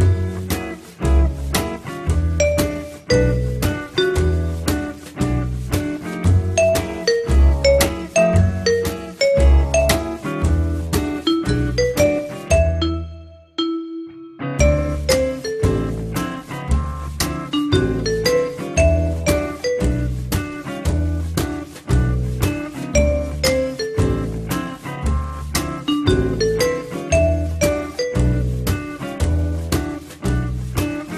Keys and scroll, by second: 16.4 Delete, 17.5 3, 19.6 r, 24.4 w.